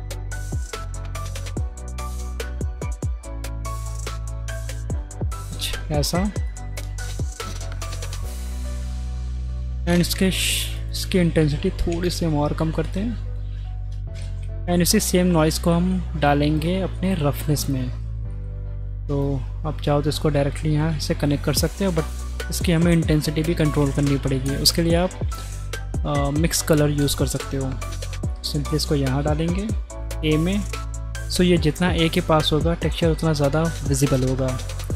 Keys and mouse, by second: 0.0-4.2 drag, 6.4-7.0 drag, 7.9 middle click, 8.5-9.2 middle drag, 9.5-10.7 middle drag, 10.7-11.9 drag, 11.9-12.8 middle drag, 12.8 click, 13.0 middle click, 14.4 middle click, 15.1 middle click, 15.9 middle drag, 16.4 drag, 17.1 click, 17.6 drag, 19.3-20.5 drag, 23.8 shift+a, 31.3-32.3 drag.